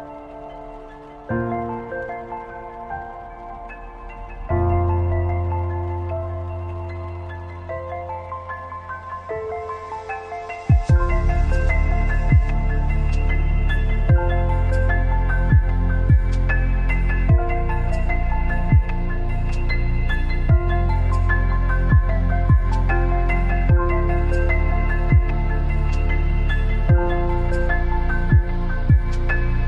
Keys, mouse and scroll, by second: 0.0-3.7 typing, 4.8-15.7 drag, 15.7 alt+scroll up 1, 16.8-23.0 drag, 24.3 Down, 26.8 alt+scroll up 1, 27.7 ctrl+t, 29.0-29.6 alt+shift+drag.